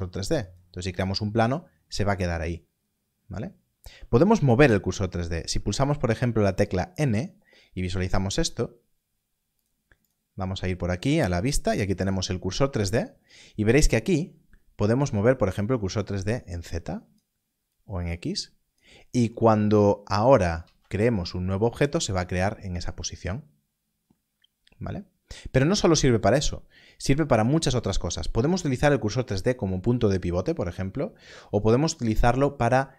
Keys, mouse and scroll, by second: 0.4 click, 6.9 Left, 9.5 n, 9.6 click, 15.5 click, 20.6 shift+a, 21.8 click.